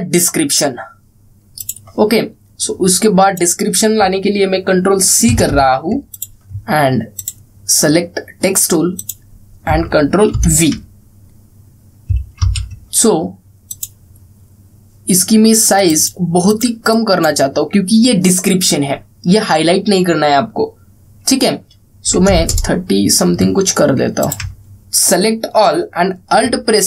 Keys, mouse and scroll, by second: 2.3-4.3 drag, 6.0 ctrl+c, 6.9 click, 11.1 ctrl+v, 13.1 ctrl+a, 14.4 click, 24.7 click.